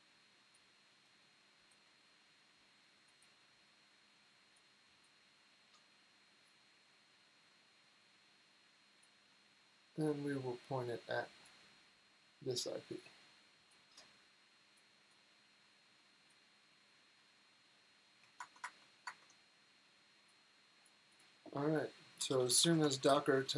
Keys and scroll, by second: 18.3 super+Tab, 18.5 super+Tab, 18.9 super+Tab, 21.9-23.5 typing.